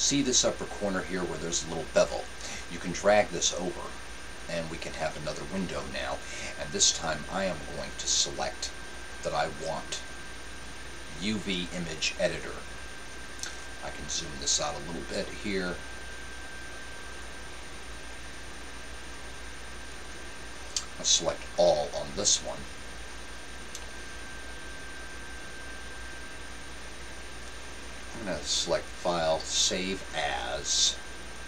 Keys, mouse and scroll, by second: 3.5-5.4 drag, 7.9-9.7 drag, 17.5-19.3 drag, 21.5 a, 28.9-30.9 drag.